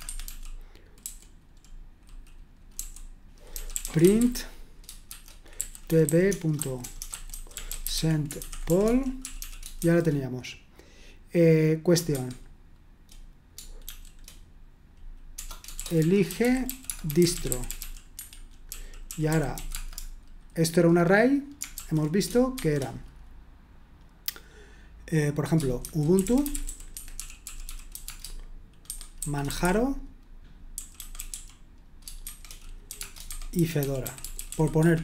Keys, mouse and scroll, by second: 0.0-1.0 typing, 2.7-10.3 typing, 12.1 typing, 13.8 typing, 15.3-20.0 typing, 21.7-22.6 typing, 25.6-35.0 typing.